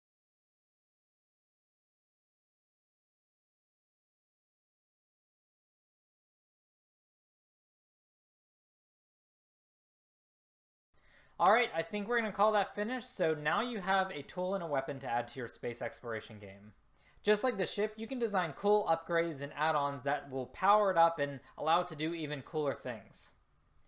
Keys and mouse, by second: 1.7 click, 2.5 click, 2.7 a, 3.4 click, 4.3 click, 5.1 click, 5.3 a, 6.2 click, 6.4 click, 6.5 click, 6.5 a, 7.4 click, 8.9 a, 10.9 a.